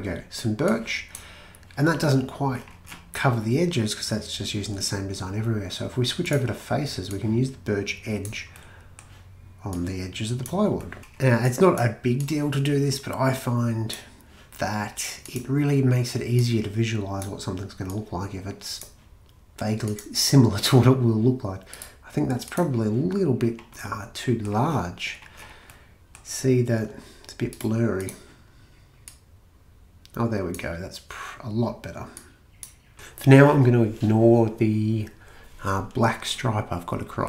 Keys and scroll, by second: 32.7-33.4 typing.